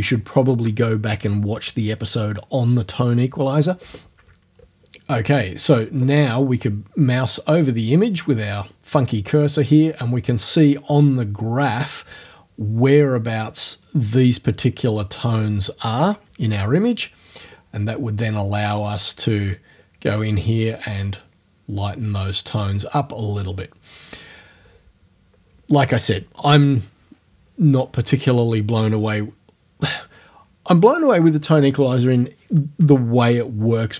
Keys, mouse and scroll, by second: 18.9 click, 21.9 click.